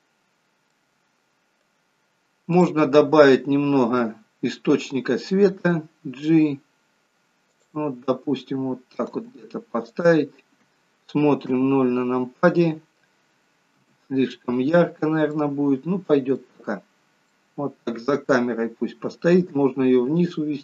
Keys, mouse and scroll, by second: 0.4-0.8 scroll down 2, 0.8 middle click, 1.9 scroll down 1, 2.7 click, 5.8 g, 8.1 middle click, 9.2 g, 11.6 KP_0, 13.8 KP_0, 15.1-15.4 scroll down 1, 15.4 middle click, 16.9 scroll up 2, 17.4 middle click, 19.5 g.